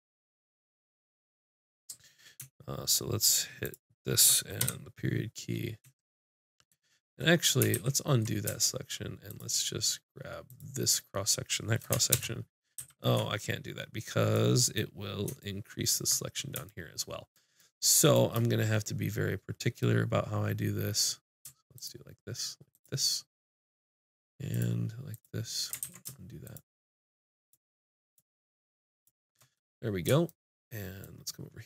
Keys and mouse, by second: 1.6-3.6 middle drag, 3.6 click, 4.6 KP_Decimal, 7.7 ctrl+z, 9.3-12.1 drag, 12.1 ctrl+KP_Add, 12.8 ctrl+z, 17.5-18.7 middle drag, 18.8-20.9 middle drag, 21.5-25.8 drag, 25.8 ctrl+z, 29.6 click.